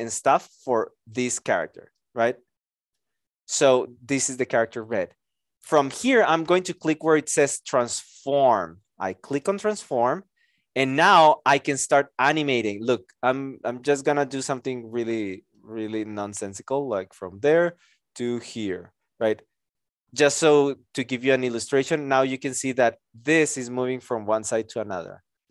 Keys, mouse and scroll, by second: 15.7 ctrl+z.